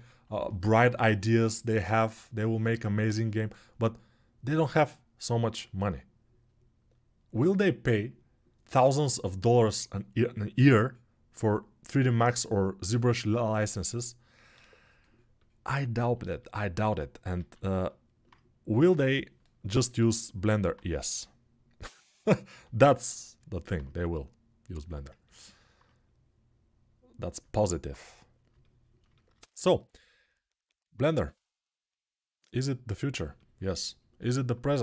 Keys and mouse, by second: 16.5 alt+q, 17.1 alt+q, 18.5 g, 19.8-21.0 middle drag, 21.0-34.8 drag.